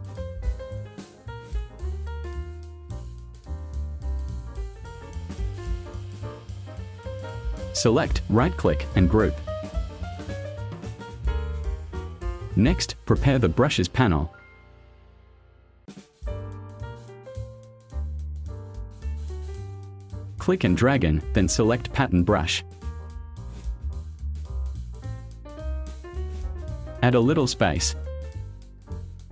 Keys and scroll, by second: 3.8 v.